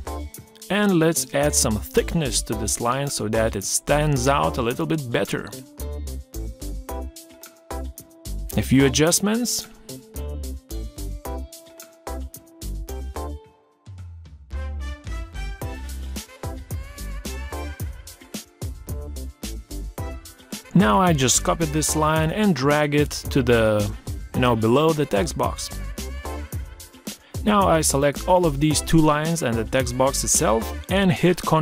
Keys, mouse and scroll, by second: 6.2 Down, 29.2 ctrl+g.